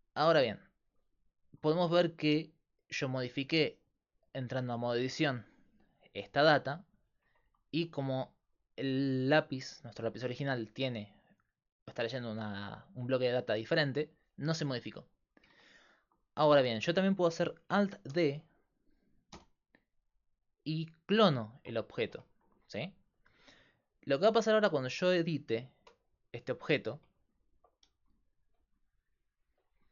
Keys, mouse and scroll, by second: 2.9-3.9 right drag, 4.5 Tab, 7.2 Tab, 9.8-11.0 drag, 18.1 alt+d, 24.7 Tab, 26.8 a, 28.0 g, 29.5 z.